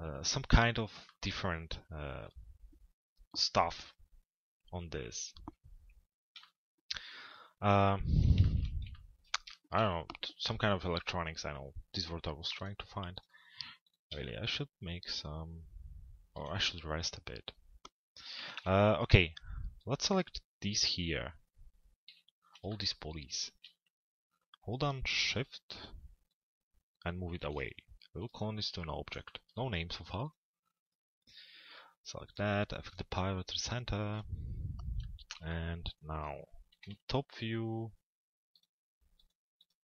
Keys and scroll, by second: 18.1 t, 18.5 z, 22.1 p, 36.4 t, 36.9 z.